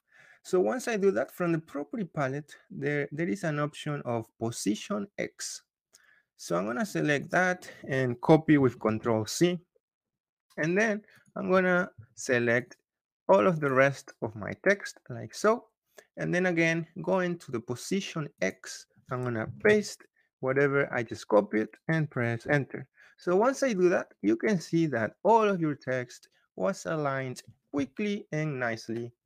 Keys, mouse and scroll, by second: 7.2 click, 8.6 ctrl+c, 11.1 click, 11.4 Escape, 11.8 Escape, 12.5 click, 13.5 click, 18.3-19.4 drag, 19.4 ctrl+v, 22.3 Return, 24.9 Return.